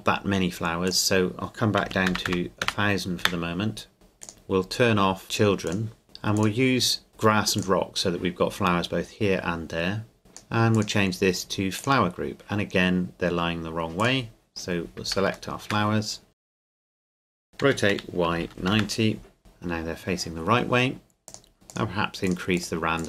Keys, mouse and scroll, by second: 0.9 click, 1.8 KP_1, 2.1 KP_0, 3.3 KP_Enter, 3.9 scroll down 1, 4.2 click, 5.1-5.7 scroll down 1, 5.7 click, 6.0-6.4 scroll down 1, 6.4 click, 7.6 click, 10.2 click, 15.5 shift+middle click, 15.8-16.3 scroll down 2, 16.3 right click, 16.7 KP_Decimal, 17.0 shift+right click, 17.6 r, 17.9 y, 18.3 KP_9, 18.7 KP_Enter, 19.4-21.3 scroll up 2, 21.3 click, 21.7 click.